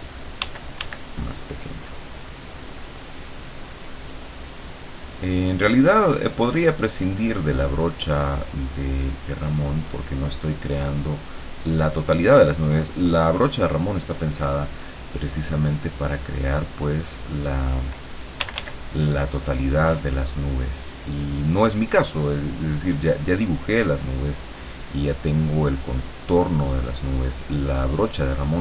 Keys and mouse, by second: 0.4 d, 1.4 click, 2.4 click, 3.0 click, 4.4 click, 5.2 click, 8.3-9.3 drag, 12.5-14.3 drag, 15.4 click, 15.8 click, 18.5 d, 19.1 click, 20.4 click, 21.3 click, 22.2 click, 22.7 click, 25.2-27.4 drag.